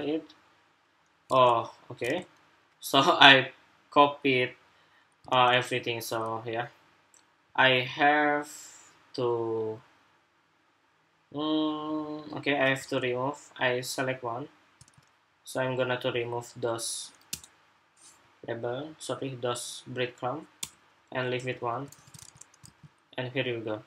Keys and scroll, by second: 1.5 super+Tab, 1.8 super+Tab, 5.0 super+Tab, 12.6 super+Tab, 14.5 super+Tab, 21.9 super+Tab, 22.4 super+r.